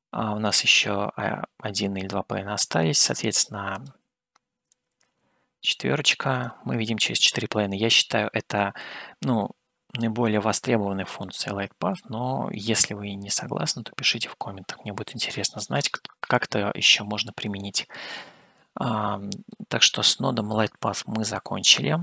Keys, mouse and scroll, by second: 4.1-8.8 drag, 9.6-10.4 scroll down 1, 10.4-11.4 middle drag, 12.8-14.7 middle drag, 18.7-19.8 middle drag.